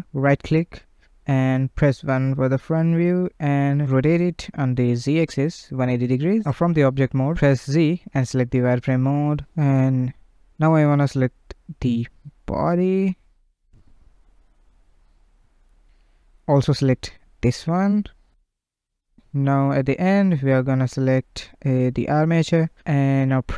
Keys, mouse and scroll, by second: 0.3 KP_1, 0.9 scroll down 1, 1.3 shift+c, 2.5 r, 6.5 Tab, 7.6 z, 9.7-11.4 drag, 11.9 z, 12.8-15.5 middle drag, 15.5-16.0 scroll up 1, 16.6 shift+click, 19.1 scroll down 1, 20.5 shift+click, 22.3 ctrl+Tab, 23.4 click.